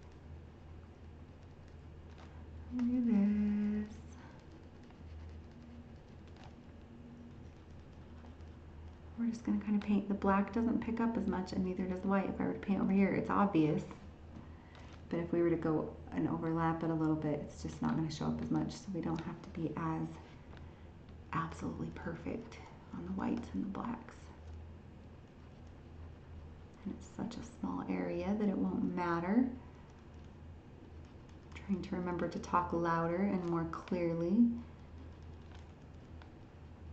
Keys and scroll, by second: 17.7 ctrl+z.